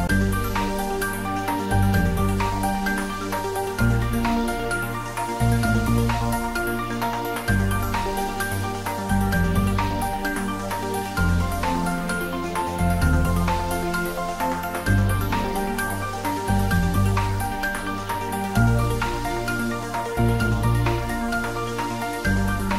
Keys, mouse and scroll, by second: 3.5 x, 3.6 click, 4.2-4.8 middle click, 4.9 Tab, 5.4 click, 5.7 Tab, 6.0 scroll up 1, 7.4 3, 7.6 click, 10.3 click, 11.0 shift+z, 12.2 s, 13.5 click, 14.1 g, 14.8 x, 16.8 click, 18.6 click, 19.4 g, 19.8 x, 20.6 click, 20.9-21.9 middle click, 21.8 scroll up 1, 22.2 shift+z, 22.5-22.7 middle drag.